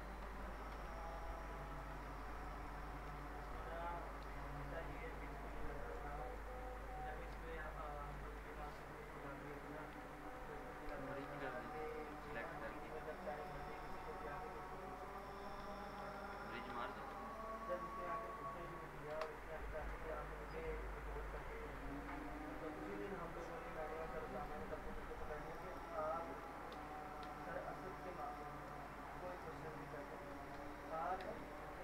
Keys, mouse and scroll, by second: 0.0-1.9 typing, 1.6 click, 2.4 middle click, 3.1 F3, 4.2 F4, 5.5-6.4 alt+middle click, 7.3 p, 8.1 alt+middle click, 8.6 click, 10.9 s, 11.8 ctrl+click, 12.5 ctrl+shift+e, 13.4 click, 13.4 click, 15.1 ctrl+click, 15.6 ctrl+z, 17.6 click, 19.1 Delete, 23.8 click, 26.3 middle click, 26.7 t, 27.2 z, 28.0 alt+click, 28.4 middle click, 29.2 alt+click, 30.5 p, 31.2 z.